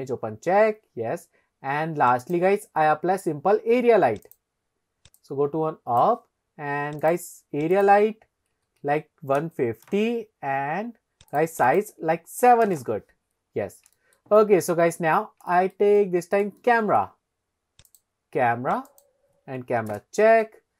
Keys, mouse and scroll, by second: 2.2-4.5 drag, 5.2 click, 7.0 click, 7.7-10.4 drag, 11.3 click, 11.7-12.8 drag, 13.5-13.9 scroll up 2, 14.0 shift+middle drag, 14.4 middle click, 15.1 scroll up 2, 15.5 shift+middle drag, 16.1-16.5 middle drag, 16.6-17.0 shift+middle drag, 17.9-19.1 drag, 20.0 ctrl+alt+KP_0.